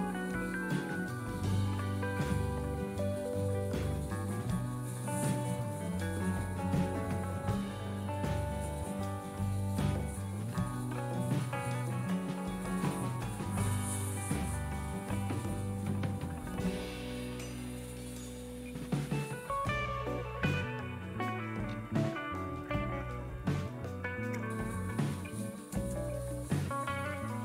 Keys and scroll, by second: 25.0 #, 26.5-27.4 typing.